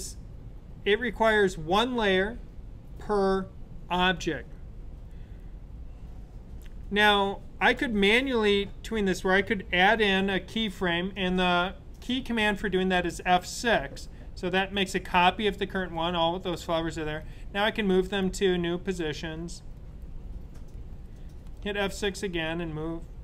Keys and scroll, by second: 14.3 F6, 21.4 F6.